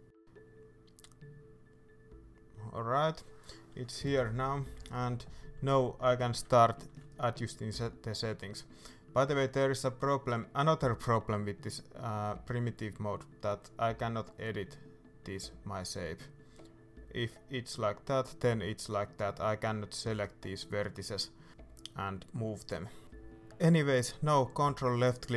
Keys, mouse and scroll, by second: 0.0 g, 3.1 middle click, 3.9-5.3 shift+middle drag, 4.1-4.4 scroll up 2, 5.3 KP_1, 6.6-13.1 shift+middle drag, 6.9-7.3 scroll up 2, 9.2-13.1 scroll down 2, 13.1-21.3 drag, 21.3-24.4 shift+middle drag, 24.4 ctrl+click, 24.9-25.3 middle drag.